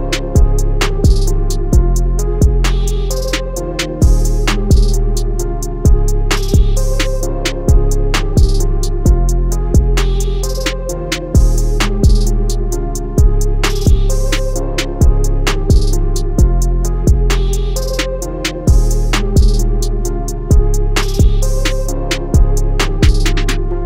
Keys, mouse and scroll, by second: 0.2 i, 0.4 click, 0.6 a, 0.8 click, 1.6 i, 2.0 click, 2.1 a, 2.6 click, 2.7 i, 2.9 click, 3.1 a, 3.2 click, 4.8 click, 5.2 BackSpace, 6.1 click, 6.9 i, 7.2 click, 7.3 a, 7.5 click, 8.3 i, 9.5 click, 11.4 click, 11.7 a, 11.9 click, 14.2 i, 16.1 click, 16.4-18.9 typing, 16.5 click, 17.6 click, 17.8 click, 18.8 click, 19.7 click, 22.3 click, 23.4 click.